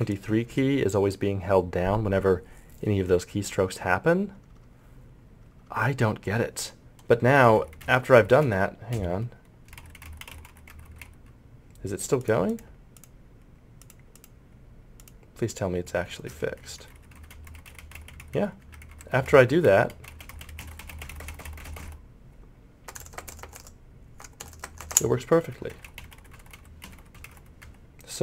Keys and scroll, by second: 7.1 Delete, 7.2 End, 7.3 Page_Down, 7.4 Insert, 7.6 Page_Up, 7.8 Delete, 7.9 Page_Down, 8.0 Delete, 8.1 Home, 8.3 Insert, 8.4 Page_Up, 8.9 Right, 9.7 Delete, 9.8 End, 9.8 Page_Down, 10.0 Insert, 10.0 Home, 10.2 Delete, 10.3 Page_Down, 10.5 Delete, 10.5 End, 10.7 Home, 10.8 Insert, 11.0 Home, 11.0 Page_Up, 15.7 Delete, 15.9 End, 16.1 Page_Down, 16.3 Home, 16.4 Page_Up, 16.6 Insert, 16.7 Delete, 16.8 End, 16.9 Page_Down, 17.1 Home, 17.5 Page_Up, 17.6 Delete, 17.7 End, 17.8 Delete, 17.9 Home, 18.0 Page_Up, 18.1 Insert, 18.2 Home, 18.2 Page_Up, 18.9 Insert, 19.0 Page_Up, 19.1 Insert, 19.2 Home, 19.3 Page_Up, 19.4 Delete, 19.5 End, 19.5 Page_Down, 19.7 Delete, 19.8 Page_Down, 19.9 Delete, 20.1 Page_Up, 20.2 Insert, 20.3 Home, 20.4 Insert, 20.5 Page_Down, 20.6 End, 20.7 Page_Down, 20.8 Delete, 20.9 Page_Up, 21.0 Home, 21.1 Page_Up, 21.2 Insert, 21.3 Page_Up, 21.4 Home, 21.6 Insert, 21.7 Page_Up, 21.8 Insert, 21.8 Home, 25.4 Delete, 25.6 Page_Up, 25.7 Insert, 25.8 Home, 25.9 Page_Up, 26.0 Delete, 26.1 End, 26.1 Page_Down, 26.4 Home, 26.4 Page_Up, 26.5 Insert, 26.8 Delete, 26.9 Page_Down, 27.2 Home, 27.2 Page_Up, 27.3 Insert, 27.6 Home.